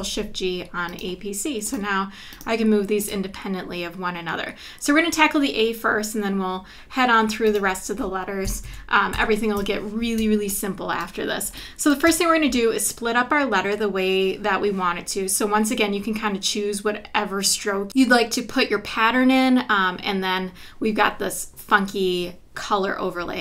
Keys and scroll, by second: 8.6 super+=, 10.2 space, 12.0 space.